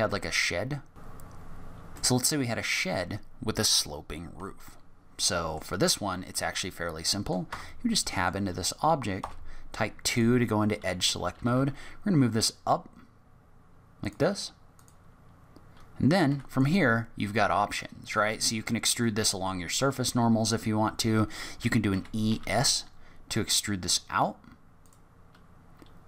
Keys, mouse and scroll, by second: 1.2 shift+a, 1.2 g, 1.4 g, 1.5 s, 1.8 click, 1.9 click, 1.9 scroll up 6, 2.0 middle click, 5.2 middle click, 6.1-6.6 scroll up 2, 6.5 middle click, 7.4 Tab, 7.9 middle click, 9.1 2, 10.0 click, 11.3 g, 14.7 click, 16.2 3, 16.5 click, 21.9 e.